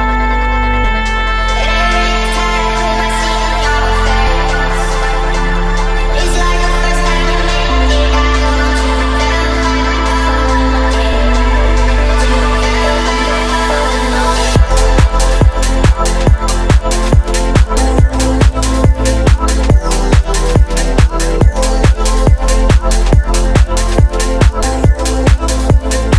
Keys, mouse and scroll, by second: 1.3 shift+a, 5.2-7.0 drag, 7.4-7.8 middle drag, 9.6 middle click, 10.6-14.3 drag, 14.3 Tab, 15.4 click, 17.5 e, 17.8 z, 20.5 click, 21.2 middle click, 21.7 click, 23.1 ctrl+b, 25.2 click.